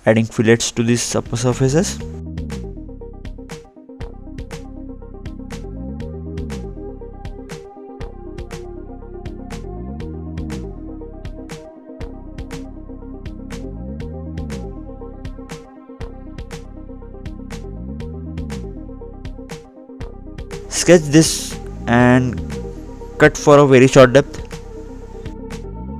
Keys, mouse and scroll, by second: 1.7 click, 4.7 scroll up 2, 5.1 scroll down 2, 6.2 click, 6.9 scroll up 2, 7.3 scroll down 2, 7.9 click, 8.3 scroll up 2, 9.4-9.8 scroll down 1, 9.8-10.1 scroll up 2, 10.1 scroll down 2, 10.8 scroll up 1, 14.0 click, 17.7 click, 17.9-18.2 scroll up 2, 19.4-19.8 scroll down 2, 20.4 click, 22.5 ctrl+8, 23.5 scroll up 2, 24.2 scroll up 1, 24.5 ctrl+8, 25.1-25.5 scroll down 2.